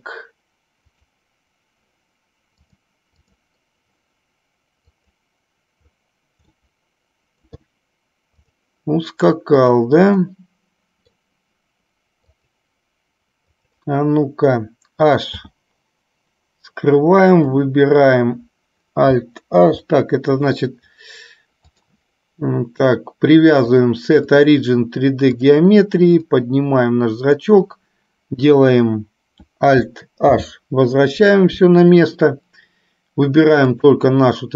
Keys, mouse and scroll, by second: 1.0 click, 2.7 click, 4.9 click, 6.7-7.7 middle drag, 8.9 click, 9.6 click, 10.4-11.4 middle drag, 12.5 click, 13.6 click, 15.5 h, 21.9 click, 23.9-25.6 drag, 26.5-27.7 drag, 30.4 alt+h, 33.9 click.